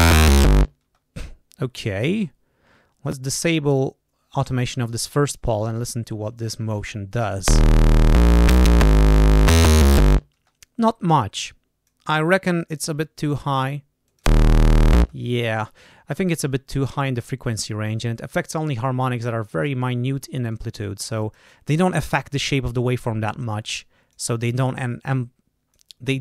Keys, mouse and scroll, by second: 0.7 space, 1.6 scroll up 2, 2.9 click, 4.1 scroll down 2, 4.8 scroll down 2, 5.4 click, 7.4 space, 10.3 space, 11.3 click, 14.0 click, 14.1 space, 14.9 space, 15.6 click, 17.0 click, 18.5-19.8 drag, 20.4-21.4 drag, 23.2-24.2 drag, 24.5-25.8 drag.